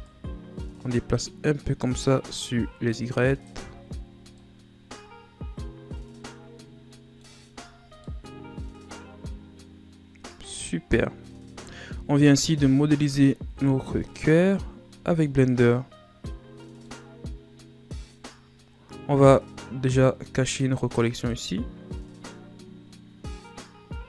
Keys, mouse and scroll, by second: 0.0 right click, 2.5 click, 3.6 Tab, 3.8-4.3 scroll down 4, 4.3-7.3 middle drag, 7.7-8.0 scroll down 2, 8.0-11.0 middle drag, 11.6-13.5 middle drag, 13.5 KP_1, 15.2-16.8 ctrl+scroll up 3, 16.8-19.8 middle drag, 21.2 click, 24.0 click.